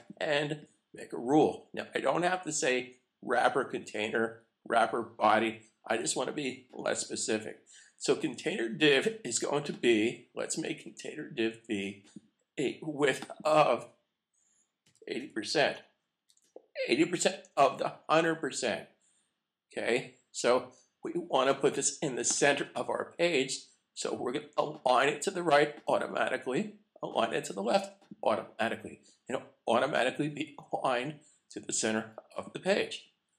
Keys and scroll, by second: 16.2 shift+5.